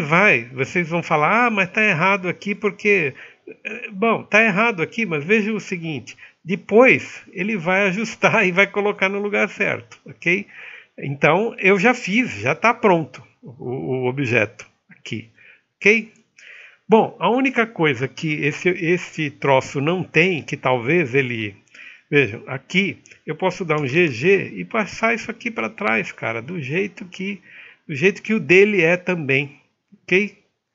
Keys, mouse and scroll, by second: 3.0 ctrl+click, 3.5 0, 4.4 click, 4.6 alt+middle click, 6.4-6.9 scroll up 1, 6.9 alt+middle click, 7.1-10.8 drag, 10.8 middle click, 15.5 alt+middle click.